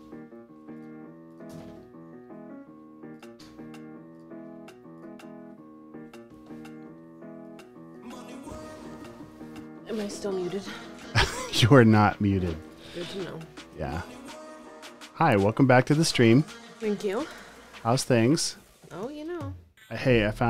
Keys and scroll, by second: 10.3 v, 12.7 space, 13.7 space, 14.2 alt+super+space, 14.7 v, 15.6 space, 17.5 space, 18.0 space, 18.7 v, 20.1 super+c.